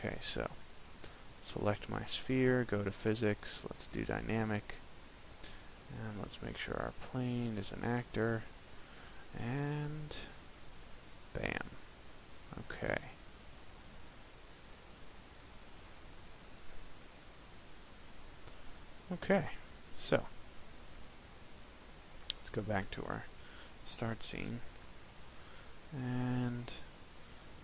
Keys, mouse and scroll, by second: 0.9 right click, 3.6 click, 5.9 right click, 7.8 click, 8.7 right click, 9.7 p, 13.5 click, 15.3 click, 22.2 click, 24.6 KP_0, 26.7 shift+middle click.